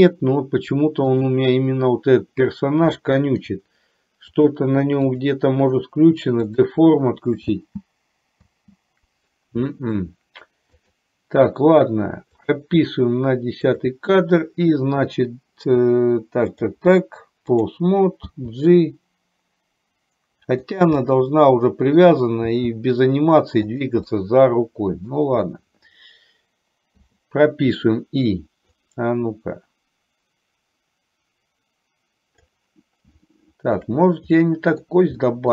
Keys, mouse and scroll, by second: 1.1 click, 3.1 shift+middle click, 4.4 click, 5.2 click, 6.7 click, 7.6 space, 8.5 space, 9.7 shift+middle click, 12.6 click, 14.0 click, 16.7-18.0 drag, 18.5 g, 21.1-22.2 middle drag, 22.5 g, 24.1-25.2 middle drag, 27.1 i, 29.0-32.7 drag, 33.4 shift+middle click, 34.5 middle click, 35.4 middle click.